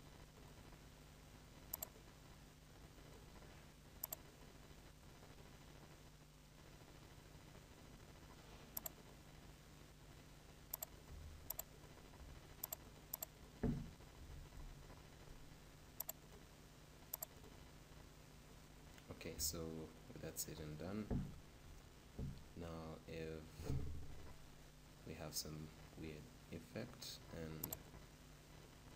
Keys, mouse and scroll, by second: 18.3 click, 19.3 shift+?, 19.5-21.6 middle drag, 21.5 p, 23.6 p, 27.6 click.